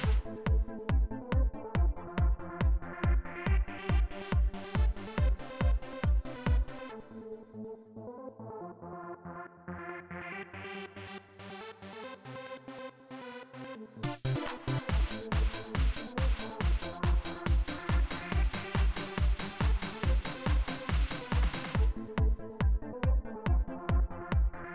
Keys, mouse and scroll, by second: 1.5 click, 3.5-4.9 drag, 5.6 right click, 6.6 right click, 7.7 right click, 8.7 right click, 9.8 right click, 10.9 right click, 12.6 click, 13.7 click, 16.2-19.1 drag, 21.2-24.4 drag.